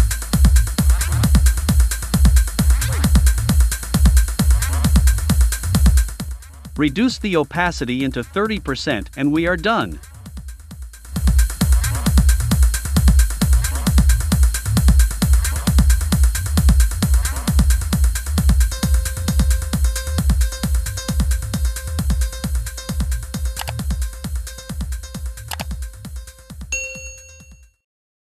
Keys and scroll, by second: 0.6 Right, 6.7 3, 7.0 Return.